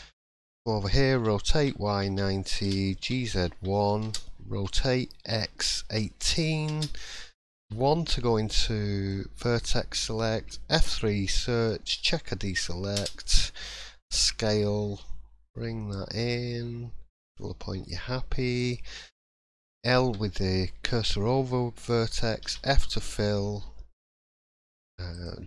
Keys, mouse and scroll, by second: 8.1-8.6 scroll up 3, 8.1 1, 8.6 shift+middle click, 9.1 scroll up 2, 9.4 middle click, 10.1 shift+middle click, 10.8 F3, 14.1 s, 20.0 l, 22.4 f, 24.2 click, 25.1 shift+click.